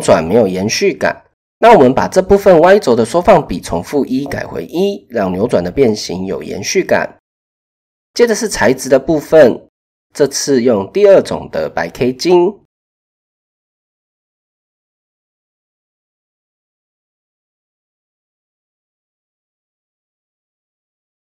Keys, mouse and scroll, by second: 0.1 click, 1.3-3.0 drag, 7.2-7.7 drag, 11.8-12.6 typing, 11.9 click, 14.8 click, 17.0 click, 17.7 KP_0, 19.7 click.